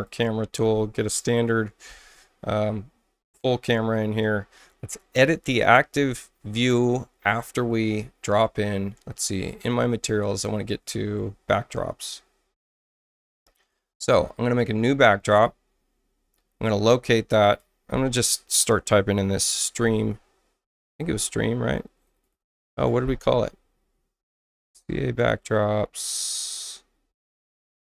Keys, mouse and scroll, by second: 7.4 click, 9.4 click, 10.0-10.7 scroll down 2, 12.7 right click, 15.3 click, 17.4 click, 19.1-20.9 typing, 22.0 BackSpace, 22.1 BackSpace, 22.3 BackSpace.